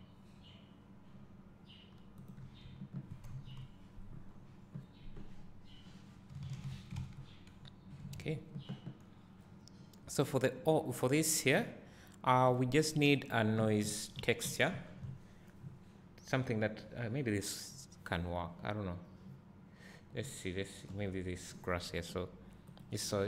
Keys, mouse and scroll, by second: 2.5 click, 4.0 KP_0, 4.5 scroll down 1, 7.0 alt+a, 7.6 a, 8.0 scroll up 1, 8.4 s, 13.1 click, 23.1 click.